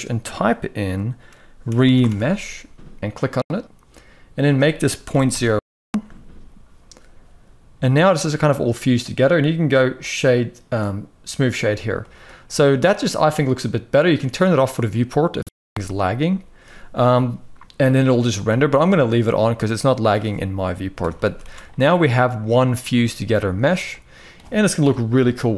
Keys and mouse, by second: 4.2-6.0 drag, 11.7 shift+middle drag, 14.3 click, 18.2 shift+middle click, 19.1-19.8 middle drag, 20.7 KP_1, 21.0 ctrl+s, 21.2 ctrl+s, 22.3 middle drag, 23.5-24.0 middle drag, 24.5 KP_1.